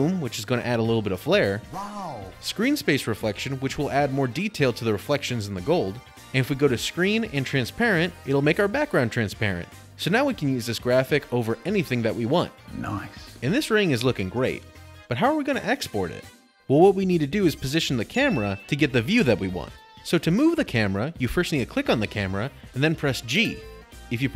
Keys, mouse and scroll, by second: 2.5 click, 7.4 click, 8.9 click, 13.8 middle click, 14.1 middle click, 14.2 middle click, 14.2 middle click, 14.3 middle click, 14.5 middle click, 16.2 middle click, 21.3 click, 22.6 middle click, 24.0 g.